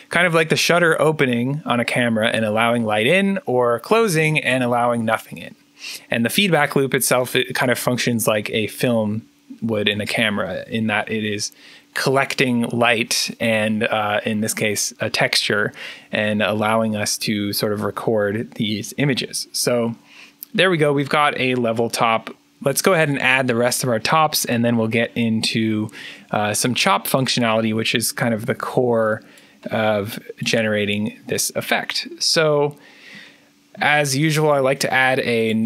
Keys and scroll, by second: 34.2 alt+n.